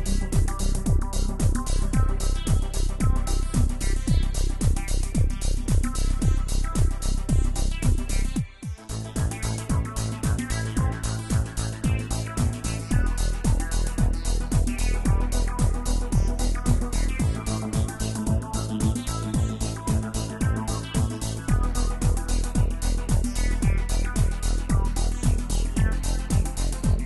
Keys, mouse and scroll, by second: 0.7 KP_0, 4.2 click, 4.9 space, 10.5 space, 13.6-18.2 drag, 18.2 space, 22.7 space, 24.1 n, 25.5 click, 26.2 drag, 26.9 scroll down 1.